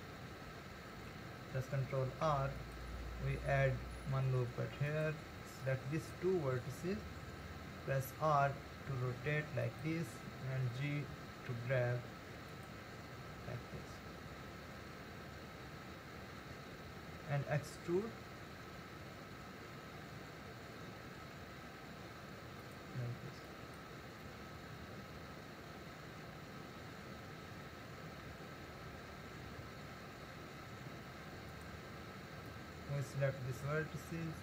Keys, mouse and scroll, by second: 2.2 ctrl+r, 5.6 click, 8.1 r, 10.6 g, 17.5 e, 23.5 click, 28.3 g, 32.5 click.